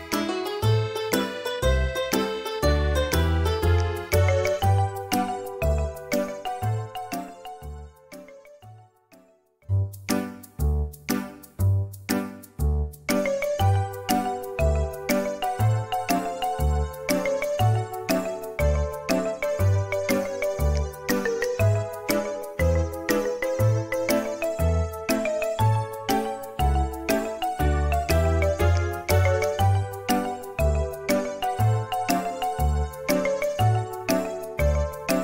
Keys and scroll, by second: 26.4 Delete.